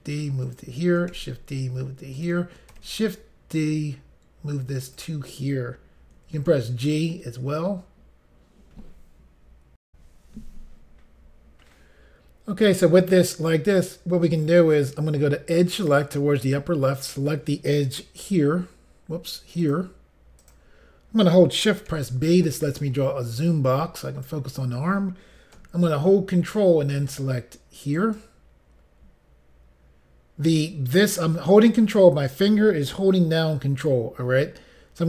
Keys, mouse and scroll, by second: 0.5 click, 1.1 d, 2.2 click, 4.8 click, 6.2 g, 7.0 click, 9.9 Pause, 15.7 click, 16.9 click, 19.6 click, 20.4 shift+click, 22.0 b, 22.5 click, 28.0 ctrl+right click.